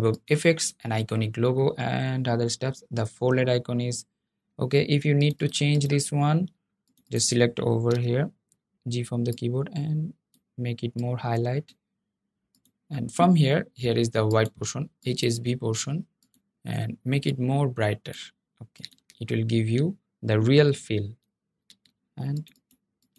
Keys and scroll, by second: 7.0 g.